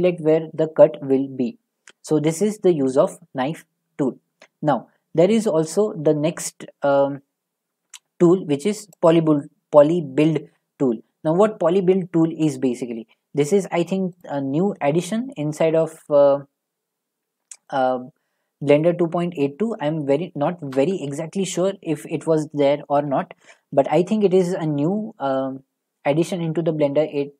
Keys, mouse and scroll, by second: 9.1-12.2 drag, 14.2 click, 20.9 ctrl+z.